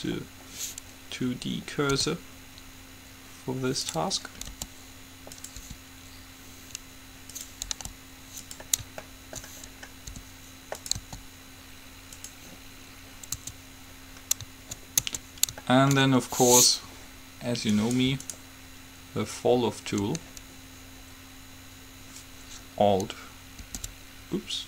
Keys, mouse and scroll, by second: 2.1 s, 4.5 click, 4.7 g, 5.8 r, 8.0 g, 10.3 r, 11.1 s, 13.5 Tab, 15.3 Tab, 18.0-19.5 right drag.